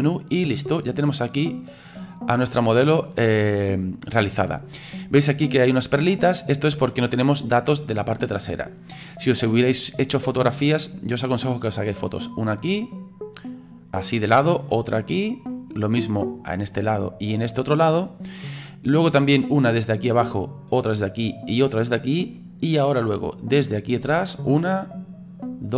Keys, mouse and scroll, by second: 0.0 scroll up 2, 0.8-25.7 middle drag.